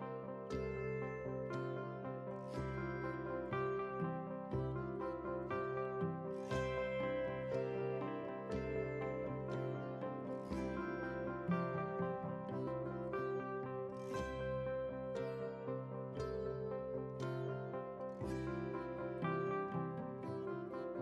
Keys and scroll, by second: 13.4 alt+Tab, 15.2 ctrl+v.